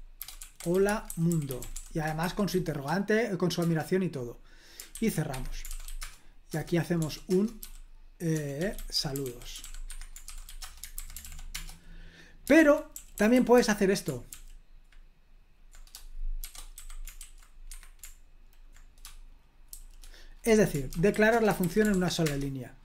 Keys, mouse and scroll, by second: 0.0-2.7 typing, 3.6 Return, 4.9-10.8 typing, 5.3 Escape, 6.5 Return, 7.3 Return, 11.0 super+h, 11.2 ctrl+p, 11.5 Return, 12.6 super+l, 12.9-14.3 typing, 16.4-17.2 typing, 17.7 Escape, 19.7-21.6 typing, 21.9 ctrl+p, 22.2 Return.